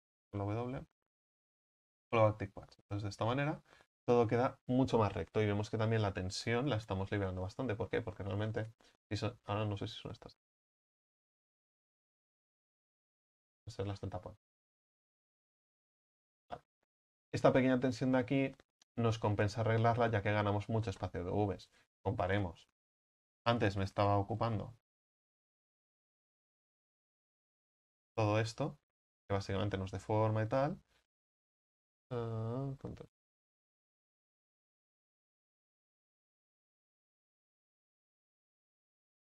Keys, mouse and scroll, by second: 1.5 w, 7.5-8.3 scroll up 18, 10.6 right click, 10.9 l, 12.1 g, 13.4 scroll down 4, 14.0-14.4 scroll up 5, 14.4 g, 15.7 g, 22.1 ctrl+z, 23.4 ctrl+z, 24.7 ctrl+z, 24.9 ctrl+z, 25.2 ctrl+z, 25.5 ctrl+z, 25.8 ctrl+z, 26.1 ctrl+z, 27.1 ctrl+z, 27.4 ctrl+z, 27.7 ctrl+z, 33.2 ctrl+shift+z.